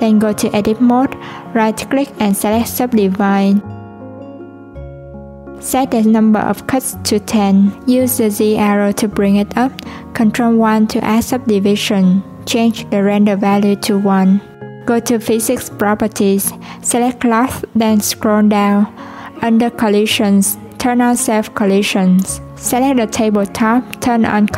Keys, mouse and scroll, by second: 1.5 Tab, 3.7 right click, 6.1-7.4 drag, 8.1 Tab, 8.7 click, 14.1-14.9 drag, 16.0-17.0 drag, 17.0-17.9 scroll down 10, 18.8-19.2 drag, 19.2-19.6 scroll down 2, 20.4 click, 22.7 click, 24.3-24.5 drag.